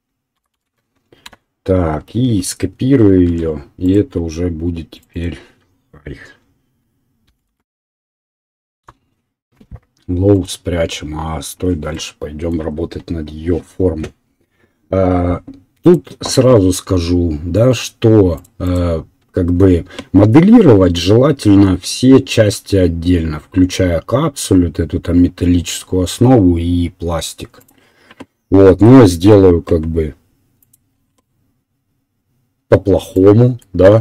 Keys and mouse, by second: 3.3 shift+d, 5.0 middle click, 5.1-8.8 drag, 8.8-15.9 middle drag, 30.9-34.0 middle drag.